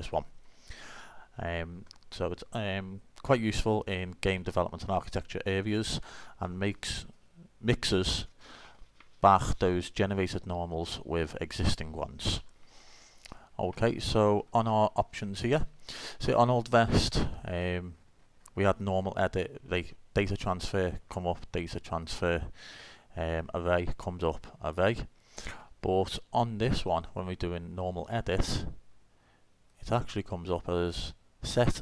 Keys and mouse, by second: 17.6-19.4 drag, 19.4 middle click, 20.6 middle click, 21.9 middle click, 22.1-24.5 drag, 24.6 middle click, 24.9-26.4 drag, 26.6 click, 27.0-28.2 drag, 28.4 click, 28.7-29.7 middle drag, 31.4-31.8 drag, 31.6-31.8 middle drag.